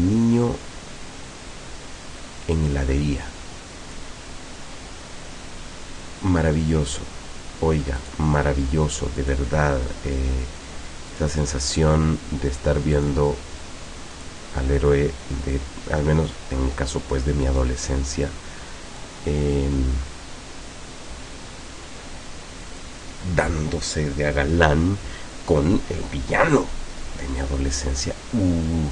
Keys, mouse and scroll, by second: 8.0 click, 9.2 click, 11.2 click, 13.0 click, 14.2 click, 15.6-18.1 drag, 19.0-23.0 drag.